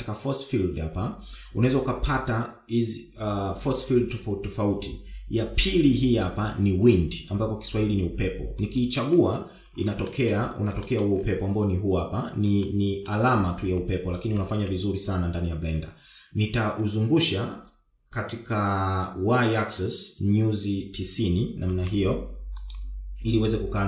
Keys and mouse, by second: 10.9 shift+middle drag, 11.7 shift+middle drag, 13.5-13.9 middle drag, 15.3 KP_1, 17.6 r.